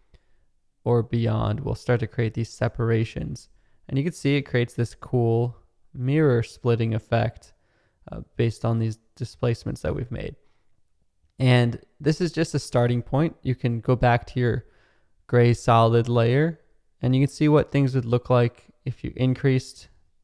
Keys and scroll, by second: 6.0 space, 12.9 space.